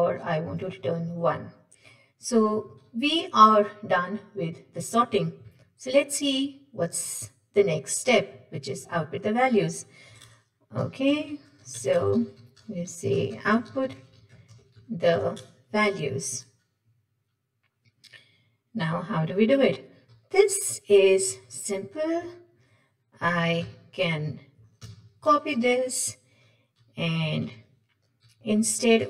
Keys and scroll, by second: 1.0 Delete, 23.6 ctrl+w, 24.8 ctrl+c, 27.5 ctrl+v.